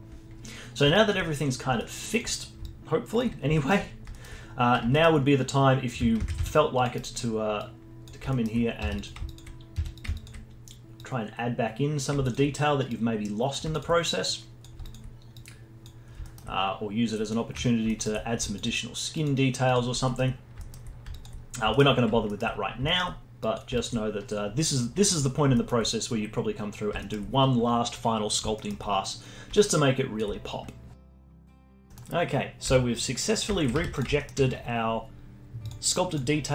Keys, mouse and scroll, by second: 0.7 scroll down 2, 0.9 alt+click, 1.4-1.8 scroll up 1, 1.8 alt+middle click, 2.0 alt+click, 2.5 scroll down 2, 2.6 alt+click, 3.5 alt+middle click, 3.8 scroll up 1, 4.1-6.2 alt+middle drag, 6.2 shift+c, 6.4 f, 6.9-8.3 right drag, 8.3 alt+middle click, 8.6 scroll up 3, 8.8 f, 9.3 alt+click, 9.5 scroll up 1, 9.7 f, 10.1 alt+click, 10.4-11.0 scroll up 2, 11.0-16.0 drag, 16.0-17.1 scroll down 4, 17.1 scroll down 1, 17.2 alt+middle click, 17.7 scroll down 1, 17.9 alt+middle click, 18.4-20.0 alt+drag, 20.0 alt+middle click, 20.4 scroll down 4, 20.6 alt+middle click, 20.9 scroll up 2, 21.1 alt+click, 21.5 scroll down 1, 21.7 alt+middle click, 22.6-23.4 scroll up 3, 22.9 alt+middle click, 23.4 alt+click, 23.6-24.2 scroll up 2, 24.2-26.4 drag, 26.4-26.8 scroll down 1, 26.8 alt+click, 27.0 scroll down 4, 27.3-28.5 alt+middle drag, 28.5 scroll down 1, 28.7-31.0 alt+middle drag, 31.0 scroll up 3, 31.3 alt+click, 31.9 middle click, 31.9 scroll up 1, 32.3 scroll down 1, 32.6 z, 33.2-33.7 scroll down 2, 33.7 z, 34.2-35.6 alt+middle drag, 35.6 click, 36.1 click.